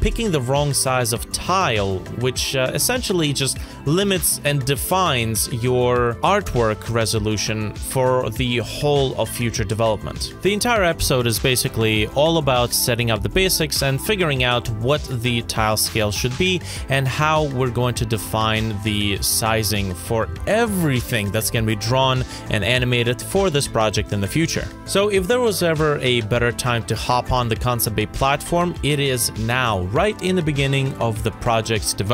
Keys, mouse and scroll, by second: 0.1 ctrl+a, 0.4-2.0 typing, 1.6 ctrl+Left, 1.7 ctrl+Left, 2.1 Return, 2.4 ctrl+s, 2.7-3.1 scroll down 2, 2.9 middle click, 3.3 right click, 6.1 ctrl+z, 9.2 Return, 10.0 scroll down 1, 10.1-10.5 scroll up 1, 10.6 scroll up 1, 11.4 right click, 11.7 scroll down 1, 12.5 1, 12.6 Return, 12.8 middle click, 12.9 scroll down 1, 13.0-13.5 scroll up 1, 14.2-14.5 scroll up 1, 14.5 scroll down 1, 14.7 F5, 17.6 scroll down 1, 17.8-18.2 scroll up 2, 18.1 middle click, 18.4 middle click, 19.7 right click, 19.9-23.0 typing, 23.3 F5, 28.1 Delete, 28.2 Return, 28.5-29.6 typing, 29.4 scroll up 1, 31.3 ctrl+click.